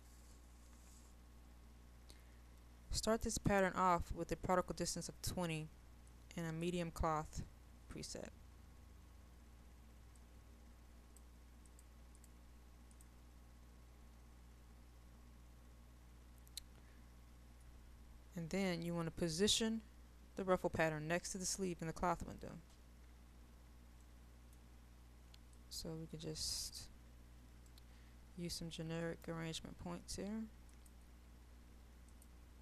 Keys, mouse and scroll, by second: 16.6 click, 22.7-24.0 scroll up 1, 24.0 middle click, 25.4 click, 27.7-29.4 right drag, 30.7-32.6 drag.